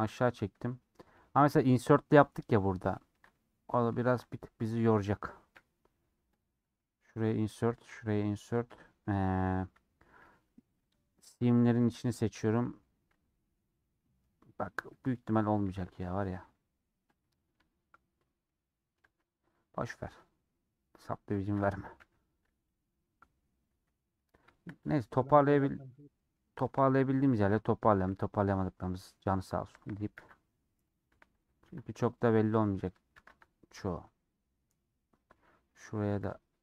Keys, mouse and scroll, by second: 2.9-4.1 shift+middle drag, 4.1 3, 4.5-6.5 drag, 6.5 middle click, 7.1-8.7 drag, 8.7 middle click, 9.1 3, 9.3 scroll down 2, 9.5-10.8 middle drag, 10.8 l, 11.1 middle click, 11.5 l, 11.8 middle click, 12.2 l, 12.6 middle click, 13.1 l, 13.3-15.6 middle drag, 17.3 middle click, 17.7 Tab, 18.5 middle click, 19.0 Tab, 20.2 click, 21.1 Tab, 22.0 /, 22.2 scroll down 2, 22.6 click, 22.9 middle click, 23.0-24.1 scroll up 2, 24.1 middle click, 24.7 click, 25.3 KP_Decimal, 25.9 middle click, 26.5 Tab, 27.1 alt+click, 27.7 middle click, 28.0 ctrl+b, 29.8 alt+click, 30.1 ctrl+b, 31.3 alt+click, 31.6 ctrl+b, 32.7 alt+click, 33.1 ctrl+b, 34.8-36.1 middle drag, 36.1 ctrl+b.